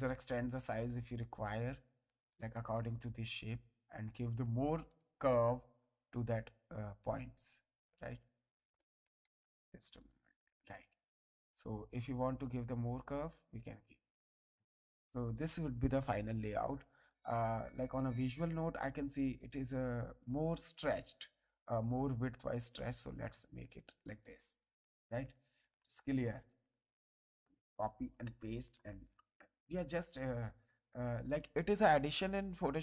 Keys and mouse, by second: 1.1 click, 4.9 click, 7.0 click, 9.2 ctrl+z, 10.0 click, 13.1 click, 14.5 click, 17.1 click, 18.4 click, 21.2 click, 22.8 click, 24.6 click, 31.5 click, 32.6 click.